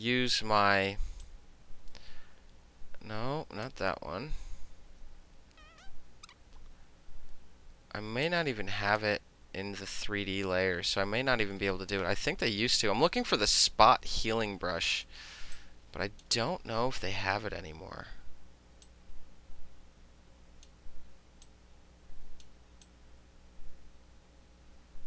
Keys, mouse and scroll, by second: 1.3-3.7 drag, 8.3 click, 13.5 click, 15.6 click, 18.9 click, 21.5 click, 22.9-25.0 drag.